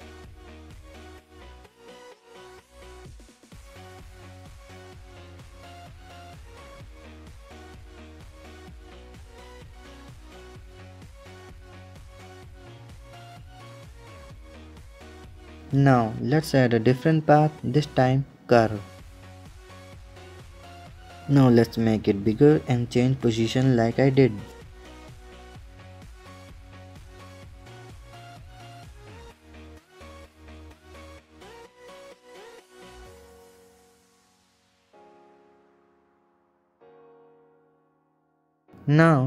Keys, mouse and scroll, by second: 1.2 click, 1.5 ctrl+KP_0, 4.0 click, 4.3 ctrl+KP_0, 6.9 scroll down 1, 7.1 click, 7.5 ctrl+KP_0, 11.8 space, 12.4 click, 12.6 KP_0, 12.9 middle drag, 13.2-13.7 scroll up 1, 13.7-15.2 drag, 16.5 shift+a, 19.5-20.4 middle drag, 20.4 s, 21.2-21.7 middle drag, 21.7 s, 24.5 KP_7, 25.6 s, 26.0 r, 26.9 middle drag, 27.0 r, 27.9 KP_7, 28.1 r, 29.5 KP_1, 29.7 KP_3, 30.1 r, 30.6-30.9 middle drag, 30.9 ctrl+z, 31.1-31.4 middle drag, 31.4 r, 32.7 KP_7, 32.9 r, 33.7-34.3 middle drag, 34.3 KP_7, 34.6 g, 35.4-36.5 drag, 36.5 middle click, 36.9 r, 37.6-38.0 middle drag, 38.0 r, 38.5 click, 39.0-39.2 middle drag.